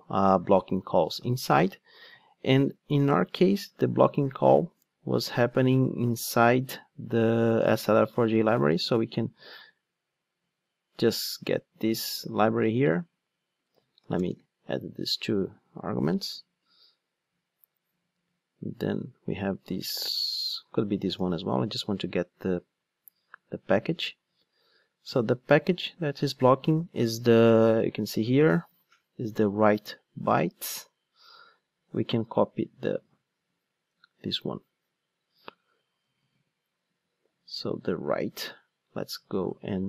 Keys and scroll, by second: 0.7 Return, 9.5 ctrl+shift+d, 21.0 ctrl+shift+d, 36.0 super+c, 38.1 super+c.